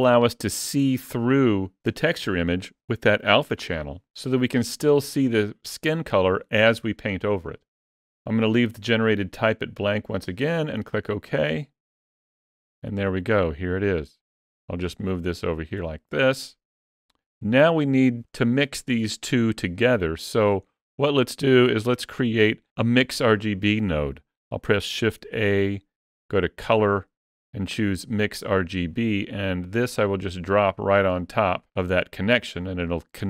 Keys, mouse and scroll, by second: 14.0 click, 19.5 shift+middle click, 20.4-21.2 scroll up 3, 21.2 shift+middle click, 21.7 shift+middle click, 25.0 shift+a.